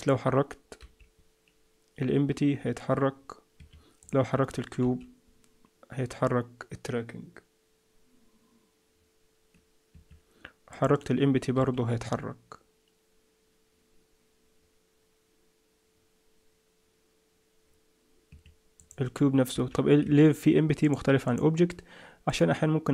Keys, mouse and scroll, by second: 0.8 g, 4.0 click, 4.8 g, 10.7 click, 11.5 g, 18.7 click, 19.5 g, 20.8 click, 21.3 click.